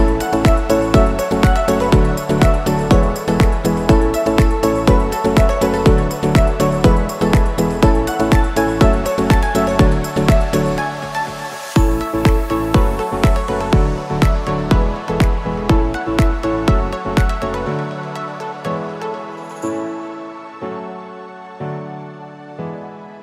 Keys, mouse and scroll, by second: 1.0-2.5 scroll up 2, 2.5-4.0 drag, 5.2-7.0 typing, 8.2-15.0 drag, 15.0 scroll down 1, 16.1 scroll up 1, 19.2-23.2 drag.